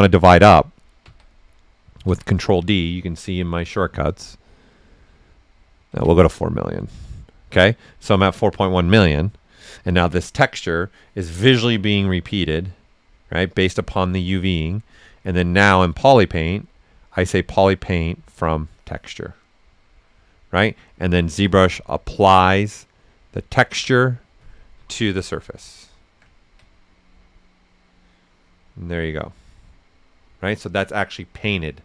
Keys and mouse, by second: 5.9 ctrl+d, 12.4-14.7 right drag, 14.7 click, 18.3 typing, 18.4 click, 24.6-31.8 right drag, 24.6 typing.